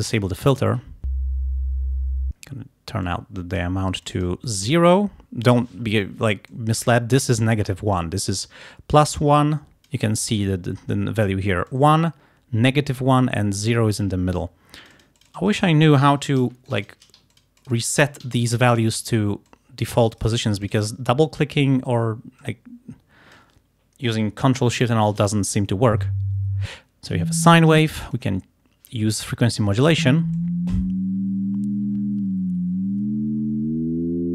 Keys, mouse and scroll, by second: 3.1 click, 4.1 click, 4.5-5.7 drag, 6.5 click, 8.0 click, 9.1-10.1 drag, 11.7-14.7 drag, 14.8 click, 15.5 right click, 16.7 shift+click, 17.4 ctrl+shift+click, 18.4 alt+click, 19.5-21.1 alt+drag, 20.2 right click, 21.5 scroll up 2, 21.8 scroll down 2, 22.4-23.6 drag, 28.2 click, 29.8 click, 30.4-31.5 drag.